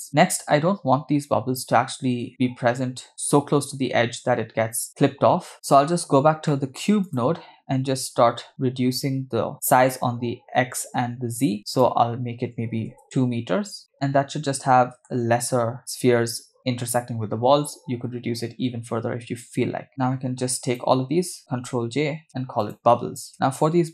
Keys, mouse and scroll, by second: 5.5 middle click, 6.5 middle click, 7.1 click, 11.6-13.0 drag, 13.8 click, 13.9 scroll up 2, 14.0-15.2 shift+middle drag, 19.9-20.8 drag, 19.9 middle click, 19.9 scroll down 4, 22.3 ctrl+j, 22.6-23.9 drag, 23.4 middle click.